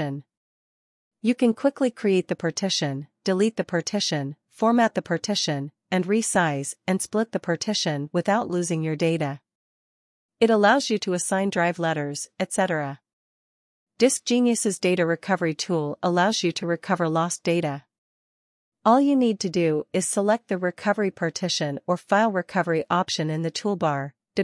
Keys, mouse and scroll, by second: 2.3 click.